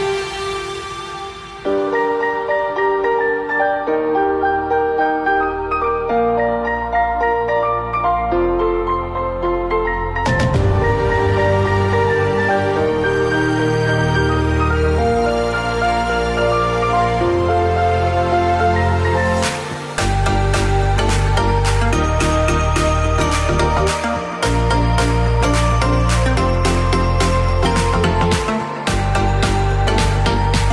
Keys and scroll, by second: 0.3 1, 8.6-12.0 typing, 8.8 Return, 14.6 ctrl+c, 18.1 ,, 18.4 Return, 18.6 ctrl+v, 22.6 ,, 22.7 Return, 24.5 Up, 24.8 End, 25.1 BackSpace, 25.5 Down, 26.0 ', 27.0-29.0 typing, 29.3 ctrl+v.